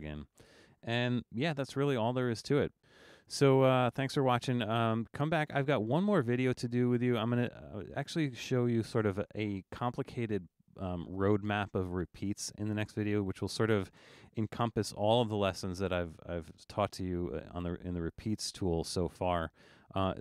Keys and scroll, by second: 1.7 super+-, 3.8 super+-, 4.0 super+-.